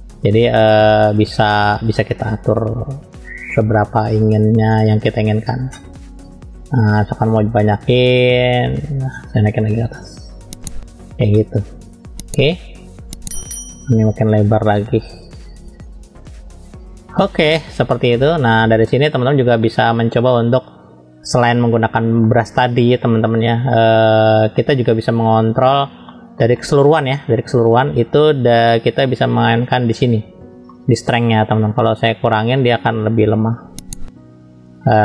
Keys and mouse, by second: 1.1-2.5 drag, 3.5-4.7 drag, 6.6-8.1 drag, 9.0-10.0 drag, 12.0-13.8 drag, 14.6-16.3 drag, 17.1 middle click, 18.5 middle click, 19.3 shift+middle click, 20.3 middle click, 22.2 middle click, 23.2-24.9 middle drag, 26.0 shift+middle click, 26.5 middle click, 28.5 click, 30.7 shift+middle click, 32.0-34.6 drag.